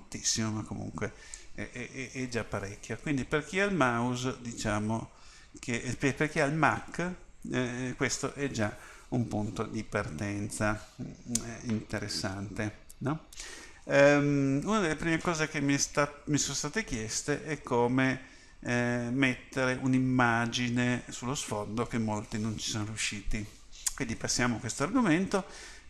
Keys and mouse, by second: 5.0-25.8 middle drag.